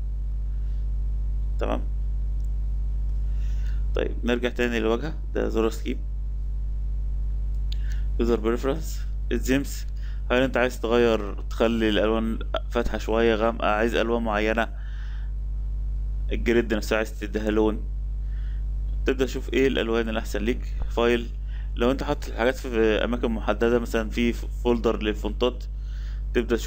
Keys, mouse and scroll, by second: 3.6 Escape.